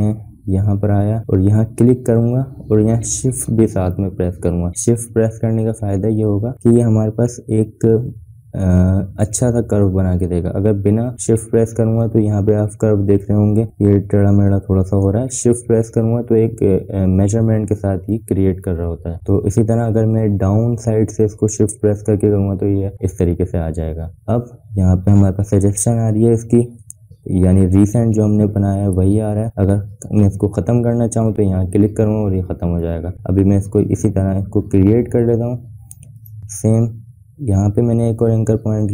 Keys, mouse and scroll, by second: 1.5 click, 1.5-10.9 drag, 36.2 click, 36.2 click.